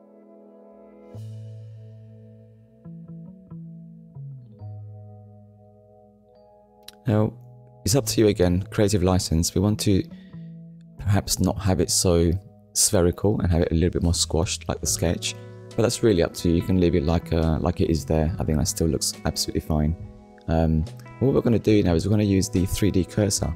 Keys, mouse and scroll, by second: 0.8 click, 2.6 click, 8.4 click, 10.5 click, 14.9 ctrl+z, 18.6 click.